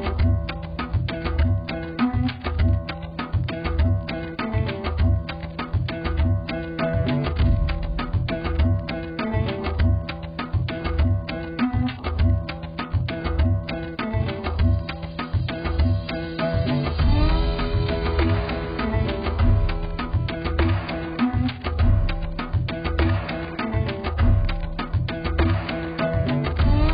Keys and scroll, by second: 7.4 z, 10.1-11.4 typing, 19.9 ctrl+z.